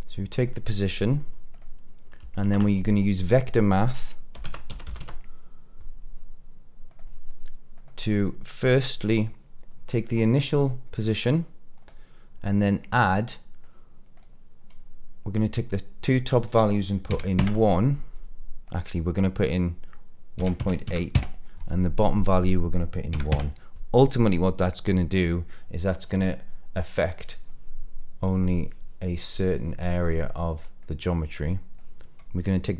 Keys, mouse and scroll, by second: 1.5 click, 2.3 shift+a, 8.0 middle click, 10.2 click, 11.0 click, 12.3 middle click, 13.0 scroll up 2, 13.2 middle click, 14.1-17.3 drag, 18.6-21.1 drag, 22.2-23.3 drag, 28.3 click, 30.0 middle click, 30.9 scroll down 2, 31.4 middle click.